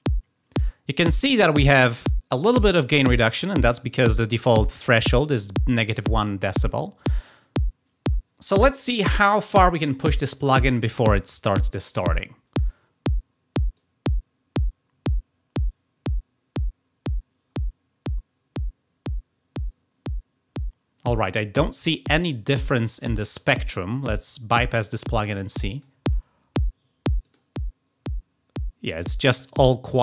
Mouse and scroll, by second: 13.7-21.0 drag, 25.7 click, 27.2 click.